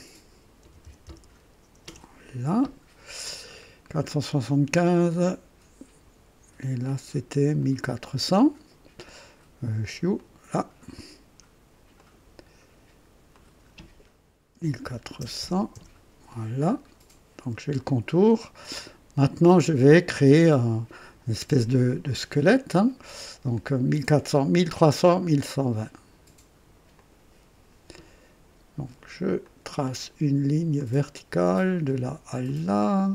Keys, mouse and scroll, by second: 0.6 KP_4, 0.8 KP_7, 1.0 KP_5, 1.8 Return, 3.0-3.7 scroll down 4, 4.0 right click, 4.0 typing, 6.5 typing, 6.8 click, 7.6 click, 10.2 click, 11.9 click, 13.3 click, 14.5 KP_1, 14.8 KP_4, 15.2 KP_0, 15.7 Return, 16.7 scroll down 2, 17.8 right click, 17.8 typing, 19.2 right click, 22.0 click, 23.1 typing, 26.9 click, 29.4 click, 30.7 click, 32.4 click.